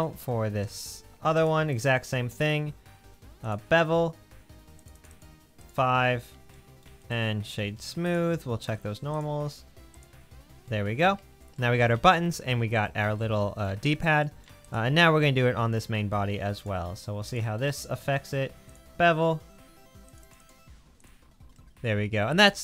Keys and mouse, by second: 9.3-9.9 drag, 10.1 click, 10.4-15.1 middle drag.